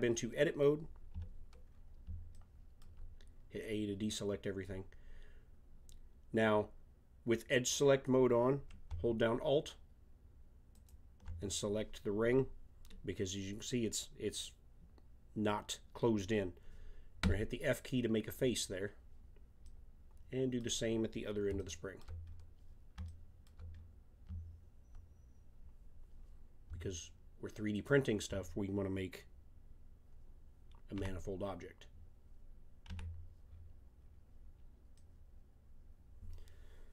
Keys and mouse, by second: 1.1 a, 4.3-9.6 middle drag, 10.7-12.7 drag, 12.7-17.8 middle drag, 17.2 f, 19.7 middle click, 23.3 middle click, 23.7 middle click, 23.8 middle click, 27.7-30.1 drag, 31.0 f, 32.9 a, 33.6 middle click, 34.2 middle click, 36.5-36.9 middle drag.